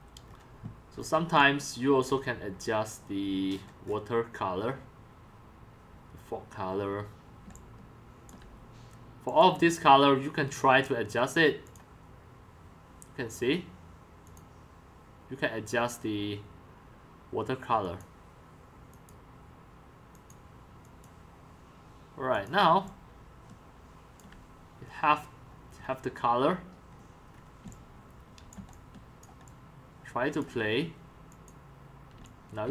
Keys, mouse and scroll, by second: 0.4-1.6 scroll down 7, 1.6 c, 1.9 c, 2.2-3.5 drag, 3.5-7.3 scroll down 9, 7.4-8.2 c, 8.5 c, 9.4 click, 11.6 click, 17.8 click, 20.1 click, 20.8 click, 22.3 click, 22.9-24.2 drag, 23.4-24.6 scroll, 24.7 click, 25.0 click, 25.8-26.7 scroll down 4, 26.7-27.2 scroll up 8, 27.2-27.8 scroll down 3, 28.3-28.7 x, 29.0-30.5 c, 31.5-32.3 drag, 32.3 x.